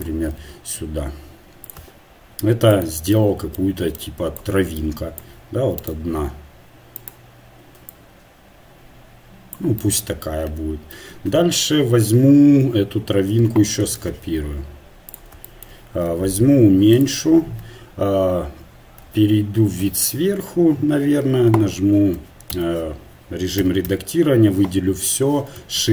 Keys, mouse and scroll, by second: 0.4 s, 2.7-4.8 right drag, 4.3-7.9 drag, 5.8-7.0 right drag, 9.1-11.0 drag, 11.0 Tab, 12.6 KP_1, 13.8 shift+d, 16.1 s, 19.6 KP_8, 19.9 KP_7, 22.5 Tab, 23.6 a, 24.0 a, 25.8 shift+d.